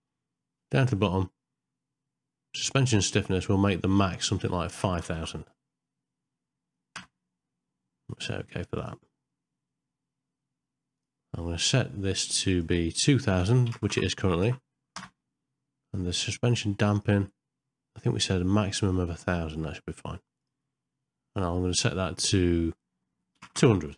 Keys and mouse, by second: 2.7-8.9 drag, 5.0 KP_0, 11.0-12.7 drag, 12.9-15.0 drag, 13.9 KP_0, 16.8-20.5 drag, 21.9-23.9 drag, 23.5 KP_0.